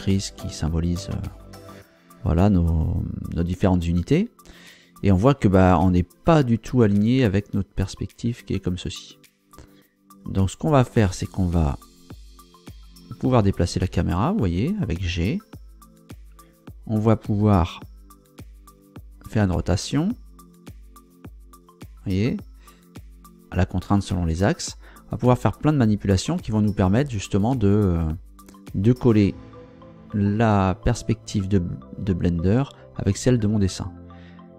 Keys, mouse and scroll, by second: 12.8 g, 16.5 Escape, 19.4 r, 23.8 Escape.